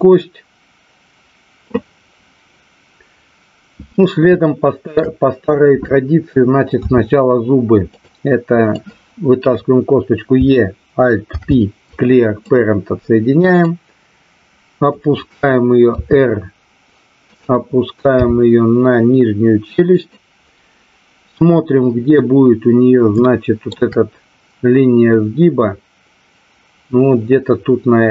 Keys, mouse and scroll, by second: 4.3 shift+middle click, 6.7 e, 7.8 click, 8.7 click, 11.2 alt+p, 13.7-14.9 drag, 15.9 r, 17.3 click, 18.1 g, 19.9 click, 23.3 shift+middle click.